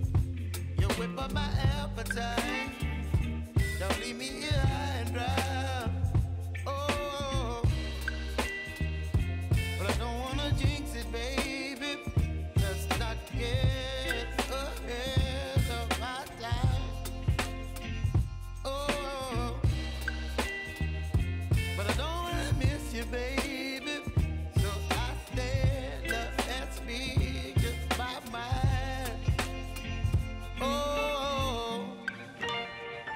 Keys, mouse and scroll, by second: 9.9 ctrl+a, 10.9 s, 11.9-17.6 drag, 17.6 j, 19.1 click, 19.4 ctrl+a, 20.0 click, 20.8 Return, 21.3 scroll down 1, 22.1 click, 23.3 F9, 24.1-27.3 drag, 27.6 space, 29.1 click.